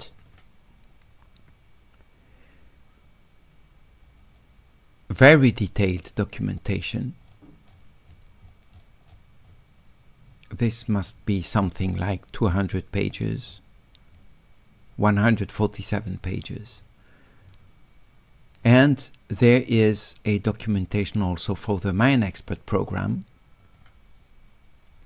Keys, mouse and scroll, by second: 0.1 click, 0.3 click, 4.0 scroll up 1, 4.2-15.1 middle drag, 16.2-17.4 middle drag, 18.6 click, 19.9 click, 22.3 click, 22.5 click, 23.8 click.